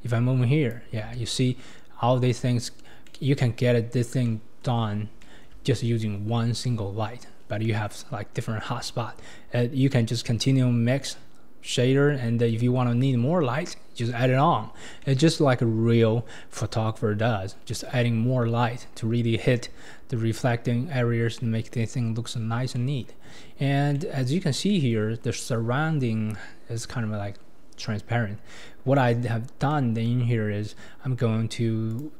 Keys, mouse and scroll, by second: 1.1 ctrl+z, 2.5-3.1 scroll down 3, 3.1-3.4 middle drag, 3.4-4.2 scroll down 8, 4.2-4.9 middle drag, 4.9-5.2 scroll down 3, 5.2-7.1 shift+middle drag, 7.1-7.6 scroll down 8, 7.6-8.1 middle drag, 8.1-8.4 scroll down 5, 8.4-8.8 middle drag, 8.8-9.5 scroll down 2, 9.5-10.1 scroll up 5, 10.1-10.8 drag, 10.8-11.9 scroll up 10, 11.9-12.5 scroll down 9, 12.5-13.1 middle drag, 13.1-14.0 scroll down 6, 14.0 middle click, 14.5-15.0 scroll down 3, 15.0-18.7 middle drag, 18.7-20.0 scroll up 9, 22.3-22.7 scroll down 3, 22.7-23.3 middle drag, 23.3-23.9 scroll down 4, 23.9-27.7 middle drag, 29.7-31.9 middle drag, 31.9 click.